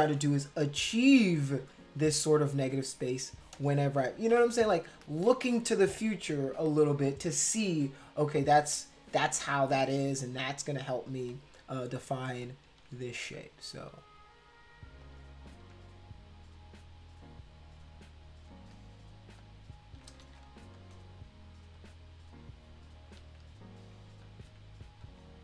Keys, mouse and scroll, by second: 0.7 click, 4.2 ctrl+z, 4.4 ctrl+z, 4.6 ctrl+z, 5.3 ctrl+z, 5.6 ctrl+z, 8.7 x, 11.1 click, 12.4 shift+click, 14.0 shift+click, 15.0 shift+click, 18.5 click, 19.4 shift+click, 20.2 ctrl+z, 20.7 click, 21.7 shift+click, 23.8 click, 24.2 shift+click, 25.0 click.